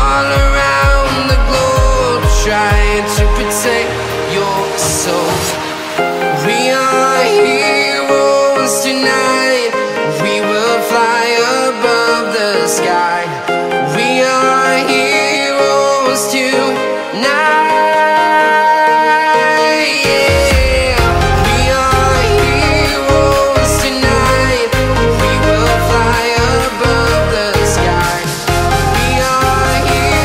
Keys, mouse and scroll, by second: 8.7 right click, 16.5 right click.